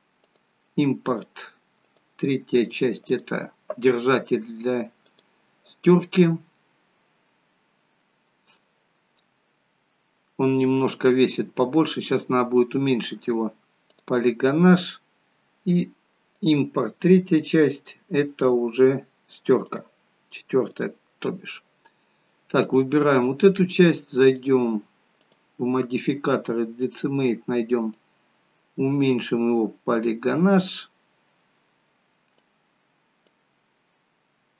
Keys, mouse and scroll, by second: 13.8 click, 22.5 click, 24.3 click, 32.3 click.